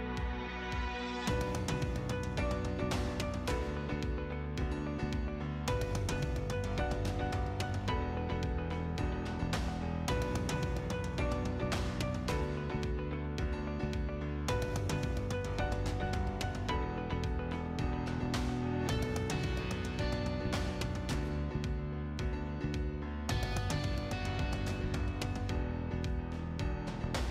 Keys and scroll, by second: 0.1 Return, 3.6 Escape, 4.7 Delete, 5.6 o, 5.9 space, 6.7 1, 7.2 !, 7.4 Return, 9.6 space, 10.5 6, 10.6 Return, 15.1 space, 22.7 1, 23.2 ', 23.5 Return.